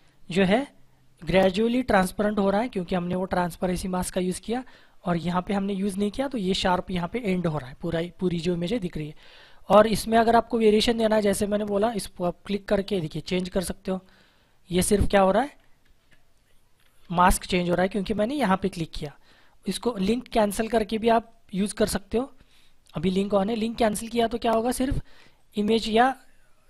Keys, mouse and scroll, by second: 8.9 click, 11.7 click, 15.7 ctrl+z, 16.9 ctrl+z, 17.9 click, 23.8 click.